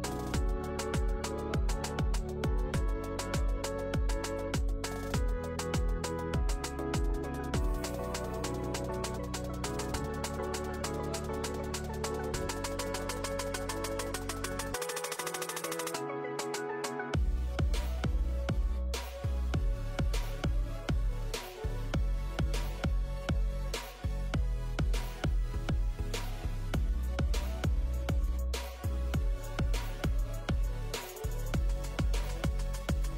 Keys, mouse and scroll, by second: 12.9 n, 13.4 Tab, 13.5 click, 13.7 click, 13.9 click, 14.8 Tab, 14.9 a, 15.2 s, 15.9-16.7 scroll up 5, 17.6 Tab, 17.7 click, 17.8 scroll down 4, 20.2 click, 20.4 Tab, 20.7 scroll up 4, 20.9 shift+middle click, 21.3 ctrl+r, 22.3 ctrl+r, 24.2 ctrl+z, 24.4 ctrl+r, 28.0 click, 28.1 alt+click, 28.4 click, 28.7 click, 28.9 alt+click, 29.5 shift+d, 30.0 p, 30.6 click, 30.9 click, 31.1 t.